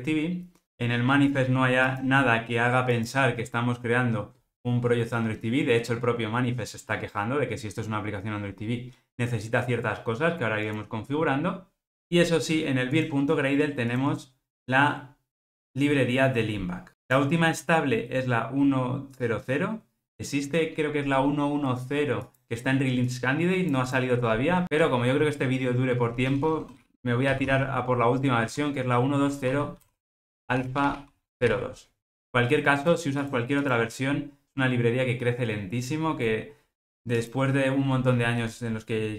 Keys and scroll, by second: 38.5 alt+Return.